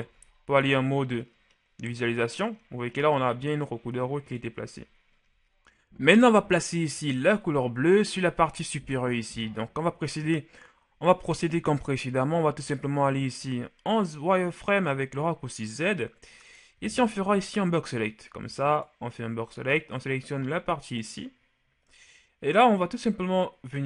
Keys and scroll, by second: 0.3 shift+z, 4.7 KP_1, 13.5 shift+z, 16.9 b.